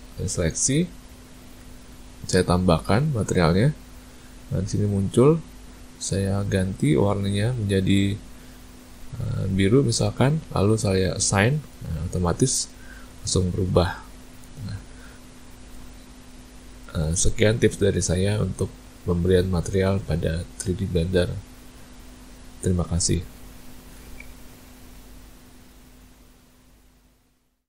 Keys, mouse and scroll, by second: 3.6 click, 6.3 click, 11.2 click, 12.9 Tab, 14.6 a, 14.8 a, 15.5 middle click, 16.3 ctrl+middle click.